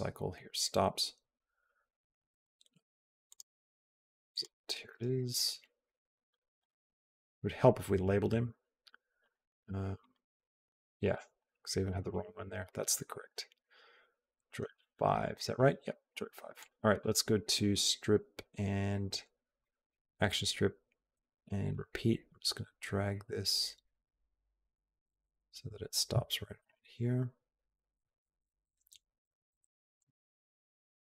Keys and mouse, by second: 3.1 click, 4.1 click, 6.4 click, 9.0 click, 9.8 click, 10.8 click, 16.9 click, 19.4 click, 21.7-29.8 drag.